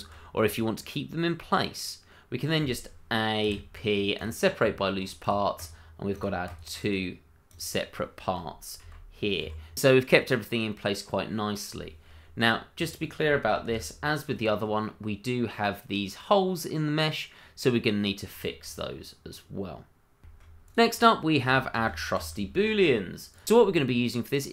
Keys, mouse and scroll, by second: 0.2 scroll down 1, 0.5 middle click, 3.4 p, 4.1 click, 4.6 Tab, 5.2 click, 5.6 double click, 6.1 click, 6.6 double click, 9.4 1, 10.6-11.0 scroll up 1, 11.0 middle click, 12.4 click, 12.8 double click, 13.6 /, 14.3-14.6 scroll down 1, 14.6 middle click, 17.4-17.7 scroll down 1, 17.8 middle click, 18.7 /, 19.2-20.0 scroll down 1, 20.2 shift+middle click, 20.5 click, 20.7 middle click, 21.1 shift+middle click, 21.4 shift+d, 22.1 click, 22.3 shift+middle click, 22.3 middle click, 22.4 shift+middle click, 22.5-23.1 scroll up 2, 22.8 shift+middle click, 23.1 middle click.